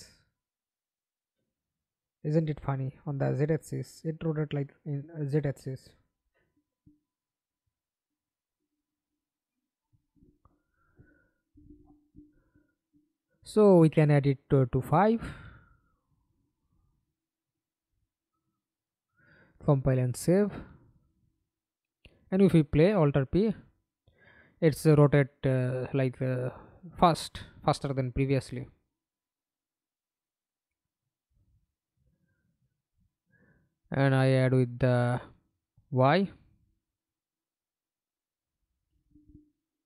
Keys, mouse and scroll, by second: 0.0-1.1 typing, 8.8 Escape, 9.2 middle click, 10.2 F11, 18.1 5, 18.4 Return, 20.2 double click, 20.6 double click, 21.6 middle click, 21.8 F11, 22.7 alt+p, 23.8 w, 24.1-25.1 a, 26.6 d, 28.4 Escape, 28.7 middle click, 29.6 F11, 31.6-32.2 scroll up 1, 36.6 alt+click, 38.8 middle click, 39.6 F11.